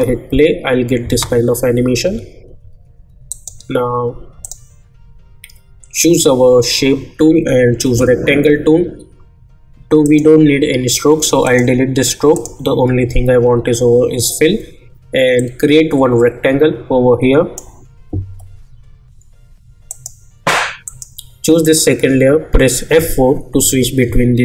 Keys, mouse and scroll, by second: 2.0 j, 3.3 click, 7.8 click, 10.0 click, 15.6-19.4 drag, 22.9 F4.